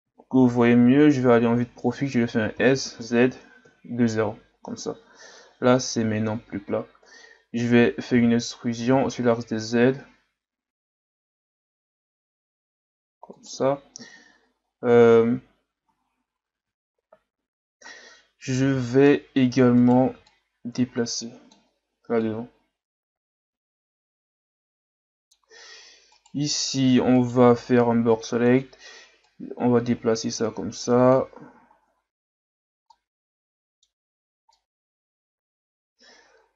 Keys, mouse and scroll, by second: 0.8 KP_3, 2.6 s, 5.5-7.3 scroll up 1, 7.3-8.2 ctrl+scroll down 1, 8.2 e, 14.7-15.2 ctrl+scroll down 1, 15.8 Tab, 16.6 Tab, 17.9-18.7 ctrl+scroll down 2, 18.7 z, 19.8 right click, 20.1 b, 22.2 click, 26.2 right click, 27.2 right click, 27.4 b, 29.3 click, 31.4 z, 31.8 Tab, 32.4-32.9 scroll down 4, 32.9-34.0 middle drag, 34.0-34.5 scroll up 4, 34.5-36.5 middle drag.